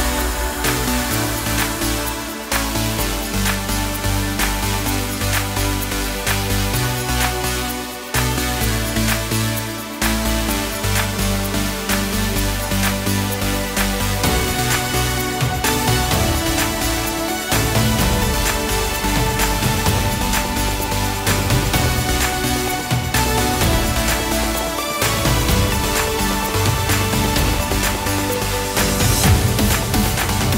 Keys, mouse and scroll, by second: 0.1 s, 0.9 click, 2.5 click, 3.6 click, 5.2 shift+d, 5.8 click, 6.8 Delete, 7.3 click, 7.6 Delete, 8.1 ctrl+z, 8.4 click, 9.5 click, 10.2-10.8 scroll down 9, 10.6 click, 11.8 shift+d, 11.9 shift+KP_Enter, 12.7 click, 14.9 click, 16.0 right click, 18.0 right click, 19.4 click, 21.6 click, 22.4 ctrl+z, 22.7 click, 23.8 click, 25.1 click, 26.3 click, 27.2 ctrl+z, 27.6 click, 29.0 click.